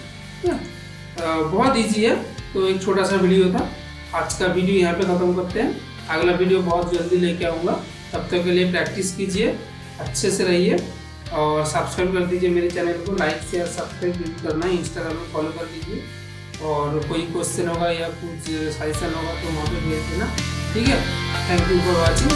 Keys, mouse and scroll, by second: 0.4 click, 1.1 g, 2.1-7.7 middle drag, 8.1 shift+middle click, 8.7-20.8 middle drag.